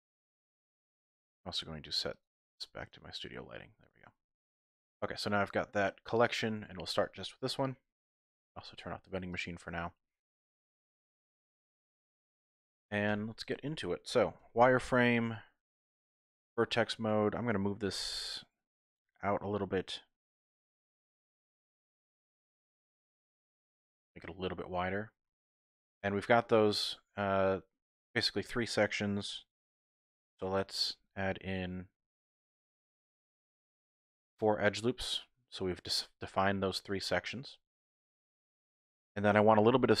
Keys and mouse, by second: 2.1-3.3 drag, 4.7 typing, 6.3 click, 9.3 click, 10.4 KP_1, 13.1 Tab, 14.4 1, 14.9 z, 15.8 shift+click, 16.6 click, 20.2 g, 20.3 x, 21.8 click, 27.3 typing, 31.1 ctrl+r, 35.3 click, 39.3-40.0 typing.